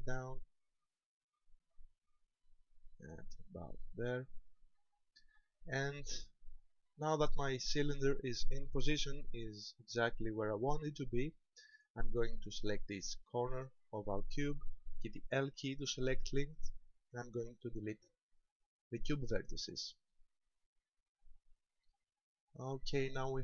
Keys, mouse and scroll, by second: 4.5 ctrl+click, 5.4 middle click, 10.7 shift+middle click, 13.1 right click, 15.6 l, 17.5 Delete, 20.1 middle click, 21.9-23.4 scroll down 9.